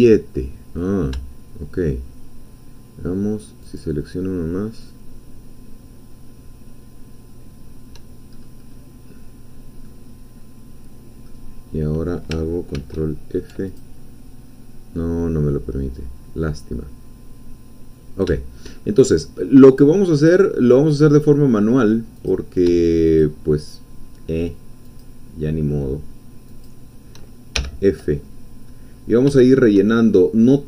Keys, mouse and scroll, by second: 3.6 shift+click, 8.3-9.1 shift+scroll up 3, 9.6 scroll down 2, 9.9-11.4 middle drag, 12.8 ctrl+f, 13.7 ctrl+click, 17.9 scroll down 2, 18.4 shift+middle click, 18.7-19.6 shift+scroll down 2, 19.6-20.0 scroll up 2, 20.0-21.8 scroll down 2, 22.2 click, 23.2-25.2 shift+drag, 26.7 shift+click, 27.6 shift+f, 29.4 shift+middle click, 30.0 shift+scroll up 2.